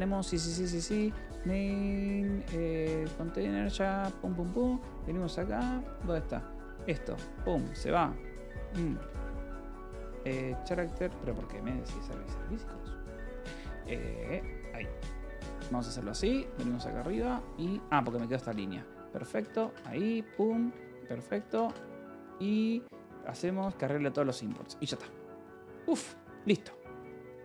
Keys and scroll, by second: 0.0-2.0 typing, 3.1 Return, 3.5-10.0 typing, 5.6 Escape, 10.9 Return, 11.2 Escape, 11.4-16.0 typing, 14.5 Escape, 17.5 Escape, 17.8 d, 18.0 Escape, 18.8 j, 19.2 space, 19.3 c, 20.2 Return, 20.6 Escape, 21.1 space, 21.3 c, 22.0 shift+a, 23.2 3, 23.5 Return, 24.0 Escape, 24.7-27.4 typing.